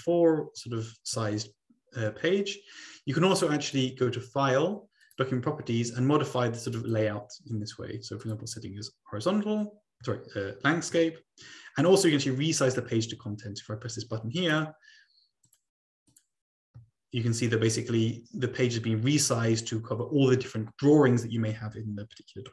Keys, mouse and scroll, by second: 1.0-1.7 scroll up 3, 2.2-2.7 scroll down 2, 2.7-3.6 scroll down 1, 3.6-4.0 ctrl+scroll up 2, 4.5 scroll up 1, 5.0 click, 5.6 click, 7.0 click, 8.3-9.4 drag, 10.4-12.1 ctrl+scroll down 3, 12.1 middle click, 14.6 click, 16.2 click, 17.2 click, 18.1-18.4 ctrl+scroll up 2.